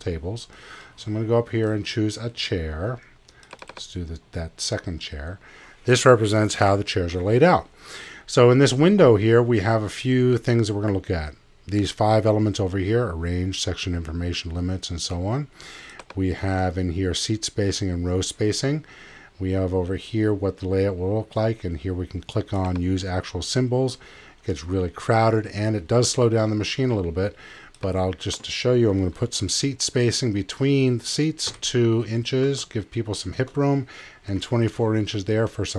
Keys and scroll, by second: 31.5 2, 32.4 Tab, 34.5 4.